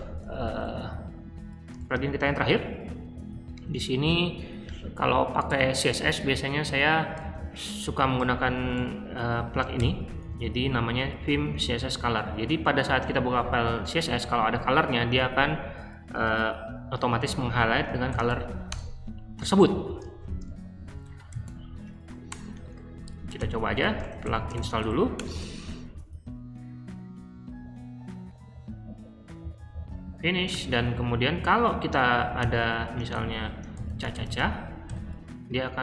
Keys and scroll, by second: 0.0-0.2 typing, 1.8-3.5 typing, 7.2 super+c, 9.7 o, 10.2 super+v, 12.0 ↻, 17.8-18.7 typing, 20.2-25.1 typing, 21.9 Up, 30.5 q, 32.4-34.8 typing.